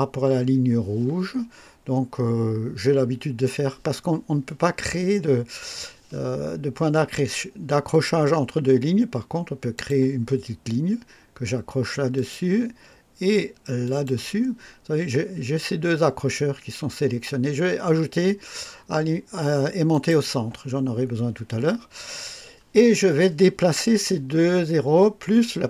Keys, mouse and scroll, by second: 9.7 click, 12.1 click, 13.8 click, 19.8 click.